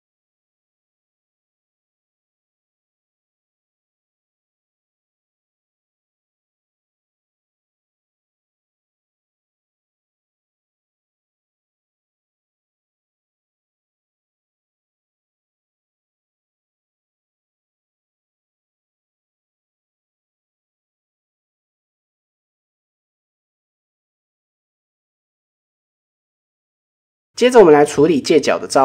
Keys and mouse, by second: 1.1 shift+middle click, 1.5 click, 2.1 shift+middle drag, 2.7 click, 4.6 drag, 4.8-5.5 middle drag, 6.4 click, 7.2 click, 8.5 KP_1, 9.5 middle drag, 10.2 Tab, 10.5 shift+middle click, 11.2 click, 11.8 middle drag, 12.6-13.1 drag, 13.5 click, 15.4 shift+middle drag, 16.3 click, 17.3-18.2 middle drag, 19.0 click, 19.2-20.2 middle drag, 20.2 Tab, 20.5-20.9 middle drag, 21.4 KP_1, 22.3 shift+middle click, 22.6 Tab, 24.2 click, 24.5 shift+middle click, 25.2 shift+middle click, 26.0 Tab, 26.9 shift+middle click, 27.7 Tab.